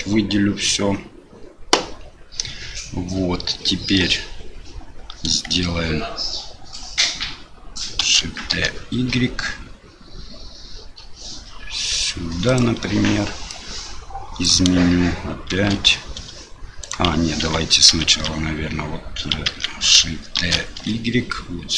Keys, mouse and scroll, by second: 8.0 shift+d, 13.5 click, 15.5 shift+d, 17.4 ctrl+z, 17.9 ctrl+z, 19.5 ctrl+z, 20.4 shift+d.